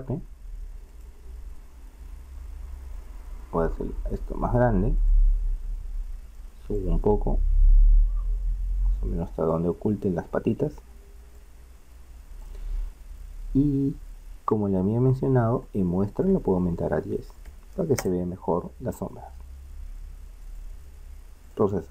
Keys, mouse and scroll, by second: 0.0 Escape, 2.7 s, 6.8-8.6 drag, 9.9-11.4 middle drag, 11.4-18.1 drag, 20.5-21.9 drag.